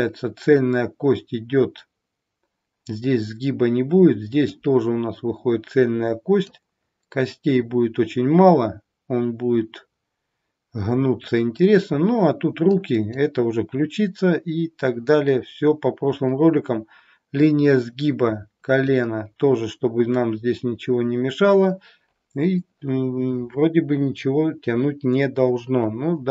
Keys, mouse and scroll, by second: 4.5 click, 9.4-12.7 scroll down 2, 12.7 click, 17.4 click.